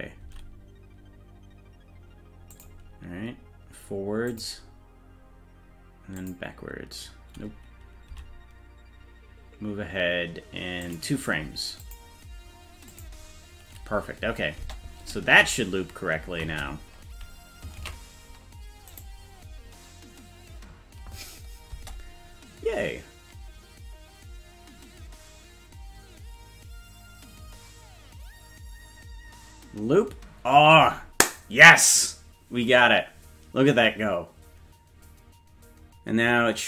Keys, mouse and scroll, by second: 0.2 g, 4.3 click, 6.2 click, 8.1 g, 11.8 click, 12.9 click, 14.6 space, 16.5 space, 18.0 ctrl+s, 18.9 right click, 21.7 space.